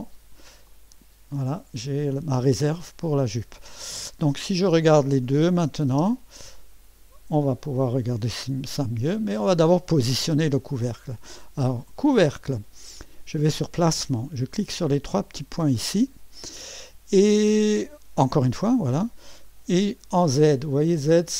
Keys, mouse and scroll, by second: 0.7 click, 5.5 click, 5.9 space, 6.6 click, 8.8 click, 11.9 click, 15.3 click, 18.3 click.